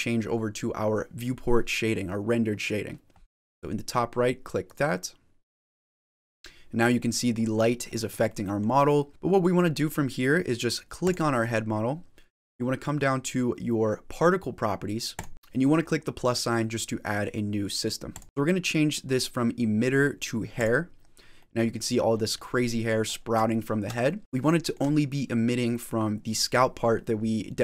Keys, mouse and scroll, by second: 5.5 click, 6.8 middle click, 8.1 middle click, 8.7-9.1 scroll down 4, 9.1 shift+middle click, 9.1 scroll up 5, 10.9 click, 15.0 click, 18.0 click, 20.6 click, 21.3 middle click, 22.0 scroll down 5, 22.3 middle click, 22.9 scroll up 7, 23.4 shift+middle click, 23.9 middle click, 24.3 shift+middle click.